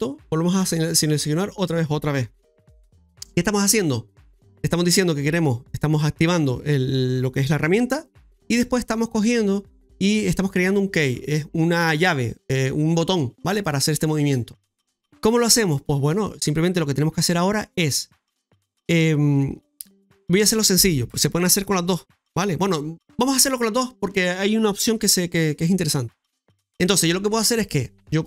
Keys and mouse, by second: 0.9 click, 28.0 shift+middle click.